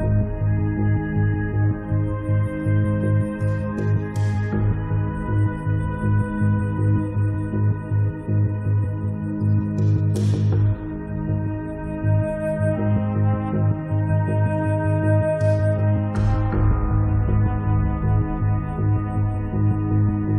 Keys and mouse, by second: 0.5-2.3 drag, 2.4 click, 2.8-4.0 drag, 4.0 1, 4.3 click, 5.0 middle click, 6.0 click, 6.4 click, 7.4 middle click, 7.8-12.1 drag, 12.2-14.9 drag, 14.9 middle click, 15.8 8, 16.5-17.8 drag, 16.5 right click, 17.2 right click, 17.6-19.3 middle drag, 19.2-20.3 drag.